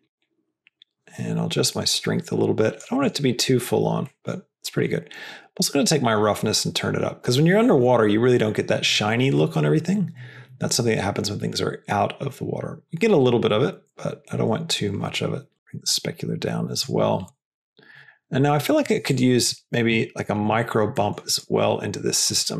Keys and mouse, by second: 0.1-2.8 drag, 2.9 click, 4.1 middle click, 4.7 middle click, 5.5-16.8 drag, 17.9 middle click, 18.6 click, 19.1 shift+drag, 19.3 shift+click, 19.8 g, 21.0 middle click, 21.3 click.